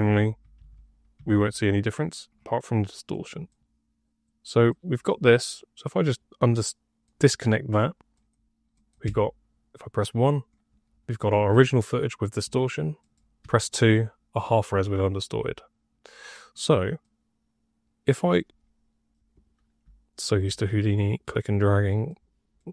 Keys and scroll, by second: 0.0-1.7 typing, 9.0 1, 13.4 2, 19.7 y.